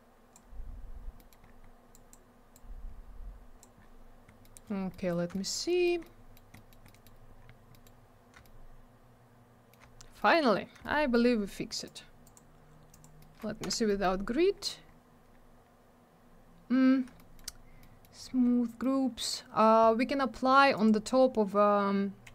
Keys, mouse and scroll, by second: 1.1 middle click, 1.3 middle click, 1.4-1.9 scroll down 1, 1.9 click, 2.1 click, 2.5 click, 3.7-4.4 scroll down 1, 4.4 middle click, 4.5 middle click, 4.6 scroll down 1, 5.0 middle click, 5.3 alt+middle click, 5.6 middle click, 5.8 middle click, 6.0 middle click, 6.5 middle click, 6.6 middle click, 6.8 middle click, 7.0 double middle click, 7.3-7.7 scroll up 1, 7.7 middle click, 7.8 middle click, 8.4 alt+middle click, 10.1 middle click, 10.3 middle click, 10.5 scroll down 1, 10.8 alt+middle click, 11.8 click, 11.9 click, 12.2 click, 12.3 double click, 12.9 click, 13.0 click, 13.1 middle click, 13.3 double middle click, 13.6 F4, 13.8 middle click, 14.0 middle click, 14.5 scroll up 1, 16.1-17.1 scroll down 1, 17.1 alt+middle click, 17.3 alt+middle click, 17.8 middle click, 18.1 scroll up 1, 18.8 middle click, 20.7 click, 20.8 click.